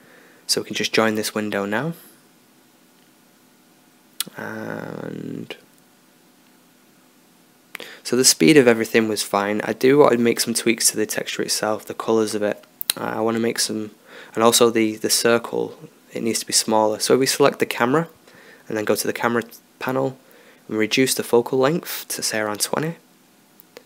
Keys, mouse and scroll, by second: 3.7-5.8 drag, 10.9 Escape, 12.4-13.0 drag, 13.2 click, 13.4 click, 14.5 middle click, 14.9-16.0 middle drag, 16.0-19.9 right drag, 17.6-20.8 drag.